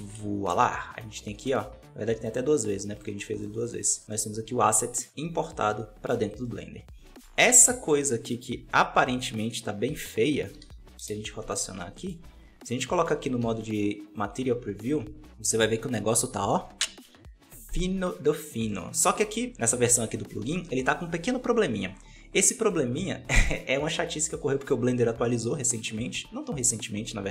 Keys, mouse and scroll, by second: 0.0 scroll up 3, 0.0 KP_Decimal, 0.8 right click, 1.2 middle click, 1.5 g, 2.5 x, 3.3 middle click, 3.9 right click, 4.0-7.3 middle drag, 7.3 r, 11.5 middle click, 12.1 alt+a, 12.3 scroll up 2, 12.7 shift+middle click, 13.3 z, 17.6-18.6 scroll down 2, 18.6 middle click, 19.5 KP_5, 20.6-22.6 scroll up 4, 22.6-27.3 drag.